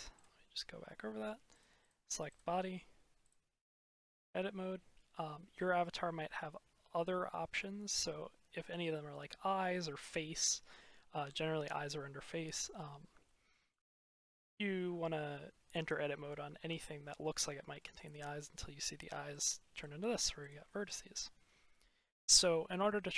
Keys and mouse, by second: 2.2 click, 3.1-3.9 drag, 5.0-6.7 middle drag, 13.1-13.6 shift+drag, 17.3 shift+click, 19.6 click, 20.3 click, 20.8 click.